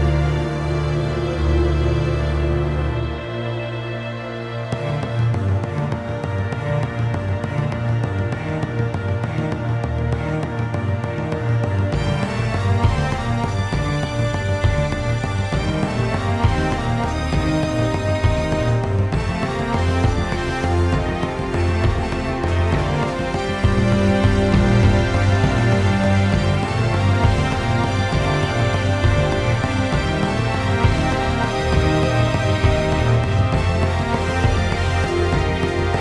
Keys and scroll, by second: 3.8 ctrl+z, 14.2-15.4 ctrl+z, 17.2 ctrl+z, 17.3 ctrl+z, 17.3 ctrl+z, 23.3 ctrl+z, 23.4 ctrl+z, 26.3 ctrl+z, 26.4 ctrl+z, 28.2 ctrl+z, 30.5-32.1 typing.